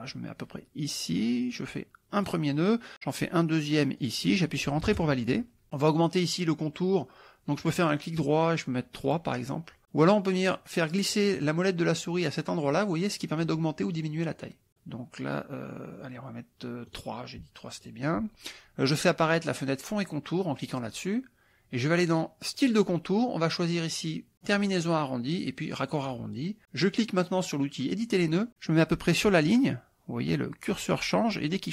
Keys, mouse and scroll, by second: 2.2 click, 4.0 click, 4.9 Return, 7.6 right click, 9.1 click, 10.7-12.6 scroll up 2, 12.8 scroll up 1, 13.2-14.2 scroll down 1, 14.3-14.7 scroll down 1, 15.9-16.4 scroll down 1, 17.0 right click, 17.8 click, 20.6 click, 22.6 click, 24.4 click, 25.8 click, 28.0 click.